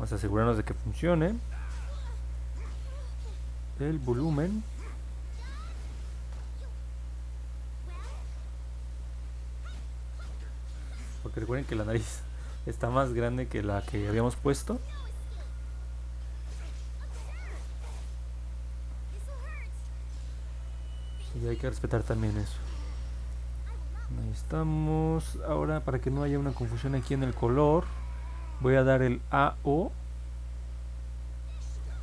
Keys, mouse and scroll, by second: 0.9 middle click, 1.4 middle click, 1.4 scroll down 1, 1.7 middle click, 1.7 scroll up 1, 5.0 click, 5.8 click, 6.5 click, 7.6 click, 10.5 click, 11.4 click, 13.2 click, 16.1 click, 17.6 click, 17.9 click, 22.4-23.0 scroll down 2, 23.8 middle click, 24.2 middle click, 29.9 click.